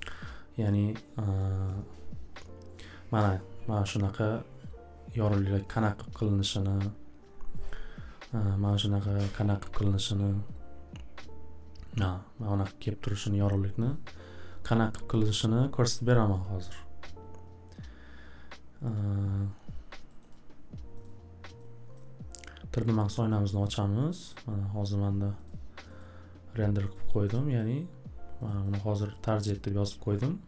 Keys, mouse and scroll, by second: 20.2-21.0 scroll, 21.0 click, 21.9 click, 23.7 click, 24.1 click, 25.4 click, 26.0 click, 26.9 click, 27.3 click, 27.6 click, 28.5 click, 28.7 click, 29.1 click, 29.5 click.